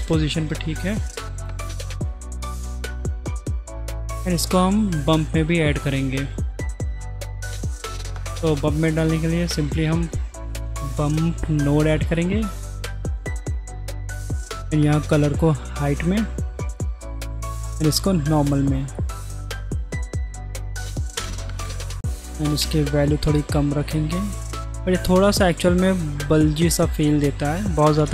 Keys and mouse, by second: 2.4 middle click, 3.6-4.7 drag, 5.5 middle click, 7.6 middle click, 8.4 click, 9.3 shift+a, 12.6 drag, 13.5 click, 14.3-15.8 drag, 16.7-17.7 drag, 18.9 middle click, 20.0-20.5 drag, 22.1 click, 23.8 click, 24.0 middle click, 27.4 middle click.